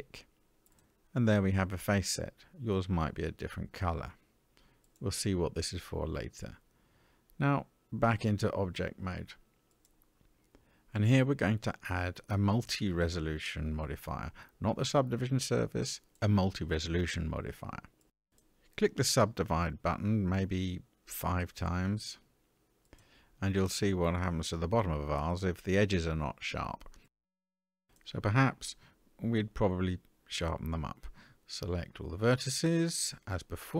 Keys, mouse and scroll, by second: 4.1-6.5 middle drag, 8.0-9.9 drag, 13.0-16.1 drag, 20.1 click, 20.9 click, 21.5 click, 22.4 click, 24.0 click, 27.3-28.1 middle drag, 28.5-29.9 scroll up 2, 29.9 Tab.